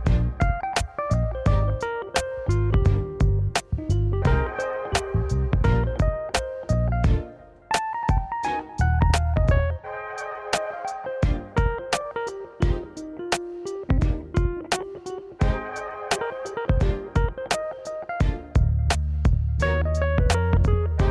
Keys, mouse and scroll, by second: 0.2 s, 2.0 g, 4.7 click, 5.9 ctrl+r, 10.7 middle click, 11.4 scroll up 1, 11.7-16.4 middle drag, 16.4 click, 20.7 click.